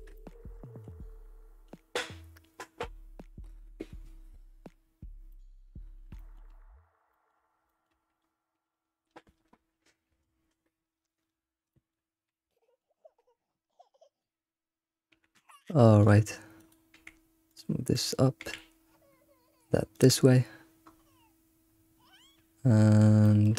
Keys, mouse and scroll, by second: 0.1 shift+middle click, 0.7 ctrl+s, 5.3 shift+middle click, 5.8-6.2 scroll up 3, 6.2 shift+middle click, 6.6 scroll up 2, 7.1 shift+middle click, 7.4 scroll down 2, 7.7 shift+middle click, 8.2 scroll up 1, 11.7-14.0 shift+middle drag, 14.0 click, 15.1 g, 16.6 click, 16.9 g, 17.9 click, 18.4 g, 20.8 scroll up 4, 21.5-22.0 scroll down 4, 23.2 shift+middle click.